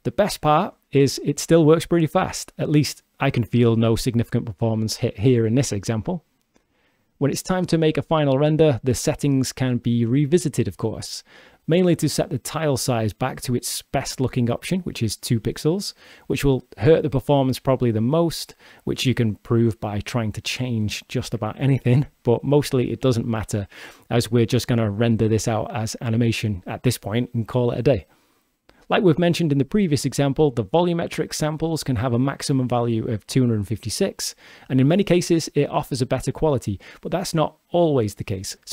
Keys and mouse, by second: 6.2-9.0 drag, 13.9-15.8 drag, 22.2 g, 25.3 click, 27.7-29.6 drag.